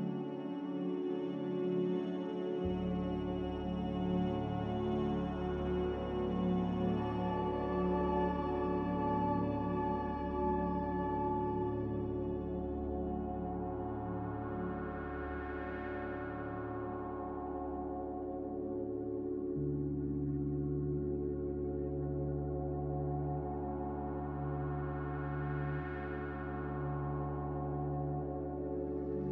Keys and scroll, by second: 0.0-0.5 typing, 3.1 1, 3.7 BackSpace, 6.9-8.6 typing, 22.1 z, 23.6-25.1 typing, 27.4 ctrl+z, 28.7-29.3 typing.